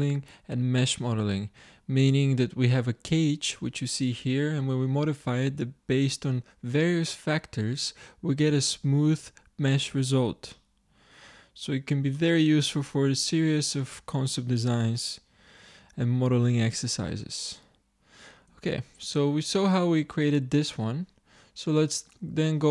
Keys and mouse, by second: 16.4 middle click, 18.5 Tab, 21.3-22.7 drag.